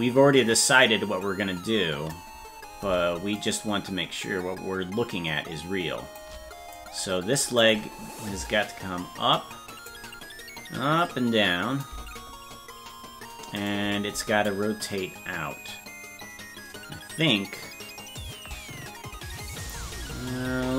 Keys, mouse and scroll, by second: 3.4-6.2 shift+drag, 6.7 click, 9.3 click, 11.0 click, 13.6 right click, 14.5-19.7 drag.